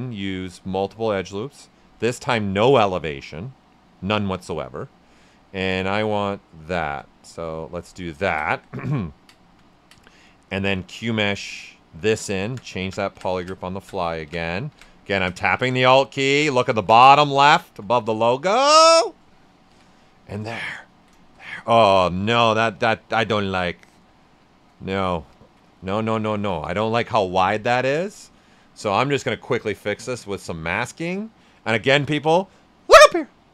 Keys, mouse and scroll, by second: 0.1 click, 3.2 space, 5.2-8.0 drag, 8.0 ctrl+right click, 9.7 ctrl+right click, 11.3-19.6 drag, 19.6 d, 20.1 ctrl+right click, 20.5 shift+f, 21.0 ctrl+right click, 23.3 shift+f, 24.2 shift+f, 25.2 ctrl+right click, 26.4 shift+d, 29.5 shift+d, 30.3-33.5 ctrl+drag.